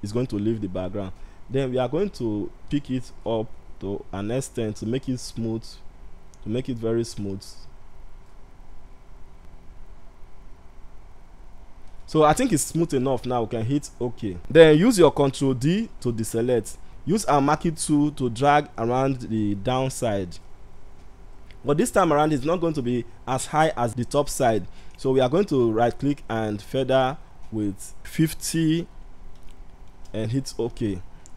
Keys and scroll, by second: 15.2 ctrl+d.